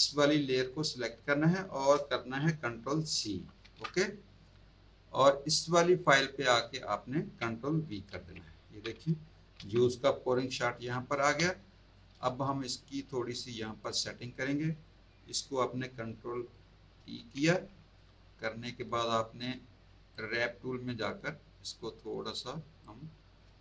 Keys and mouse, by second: 0.1 click, 3.2 ctrl+c, 6.0 click, 7.8 ctrl+v, 10.3 click, 11.3 space, 11.4 click, 14.8 click, 16.9 ctrl+t, 18.8 right click, 20.1 click, 21.1 click, 22.8 click.